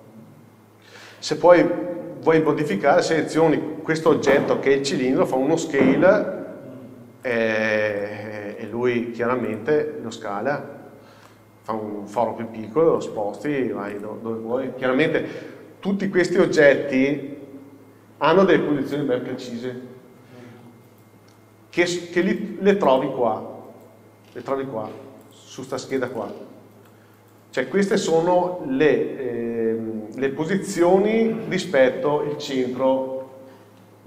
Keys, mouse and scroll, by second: 1.9-2.5 scroll up 1, 2.5 click, 5.8 s, 7.4 click, 8.0 g, 9.7 click, 10.0 scroll up 1, 11.3-12.6 shift+middle drag, 12.9 g, 14.1 click, 20.7 KP_7, 22.9 click, 25.3 click, 26.1 click.